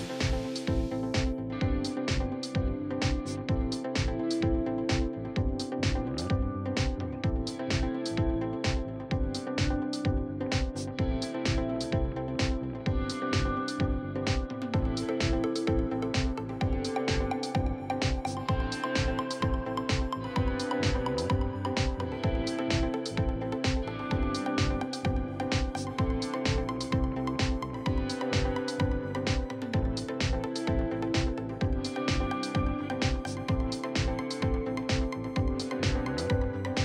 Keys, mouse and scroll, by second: 2.6 ctrl+z, 3.0 s, 3.6 click, 7.0 scroll up 1, 7.3 scroll down 2, 7.5 middle click, 8.1-9.9 drag, 10.7 click, 11.0 scroll down 4, 11.1 middle click, 11.6 scroll up 4, 11.9 KP_3, 13.7 click, 16.6 scroll down 7, 16.8 shift+middle click, 17.0 scroll up 3, 17.2 click, 18.2 e, 18.8 click, 19.3 r, 20.9 shift+middle click, 21.5 e, 23.4 alt+click, 24.2 alt+click, 25.4 click, 26.0 r, 27.6 click, 28.2 s, 29.0 click, 29.6 shift+middle click, 30.0 e, 30.4 click, 30.8 s, 31.7 click, 32.0 r, 32.4 click, 33.0 s, 35.4 click, 35.7 r, 36.1 click, 36.6 s.